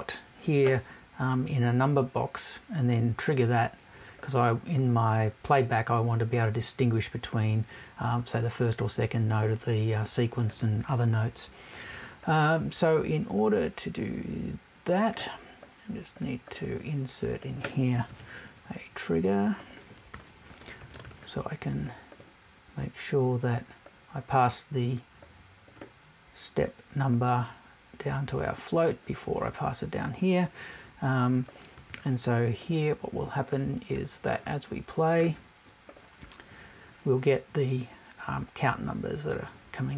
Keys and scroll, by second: 17.9 BackSpace.